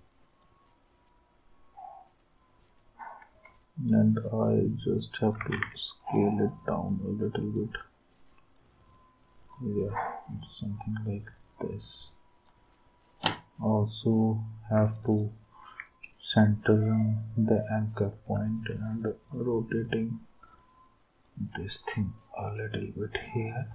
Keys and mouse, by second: 3.3 s, 5.5 ctrl+z.